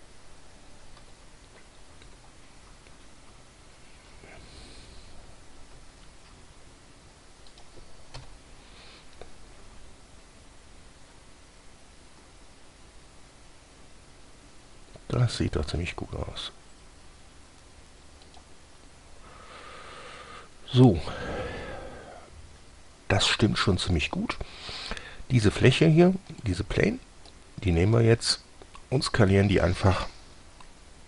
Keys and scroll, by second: 1.3-2.9 typing, 4.3 typing, 6.0 g, 8.4 1, 10.0 g.